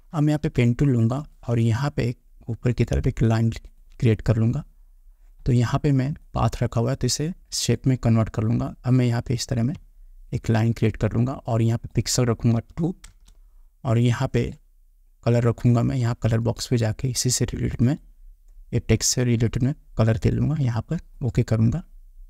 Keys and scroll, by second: 12.7 2.